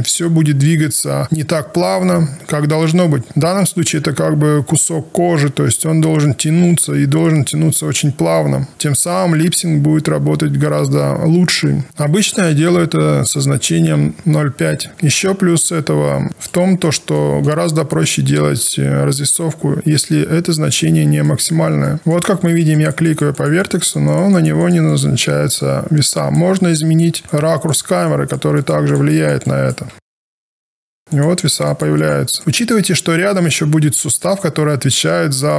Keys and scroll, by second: 14.2 KP_5.